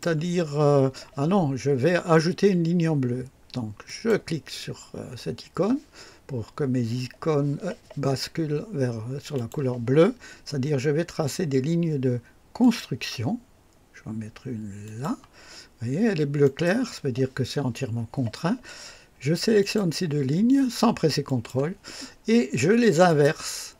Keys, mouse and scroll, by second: 3.8 click, 9.3 click, 12.6 click, 14.8 click, 16.4 right click, 19.6 click, 21.2 click, 23.1 click.